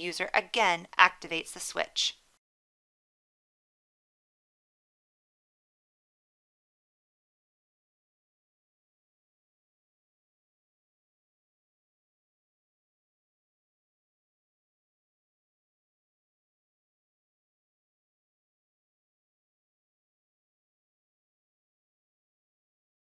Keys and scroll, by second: 7.9 1, 12.8 1.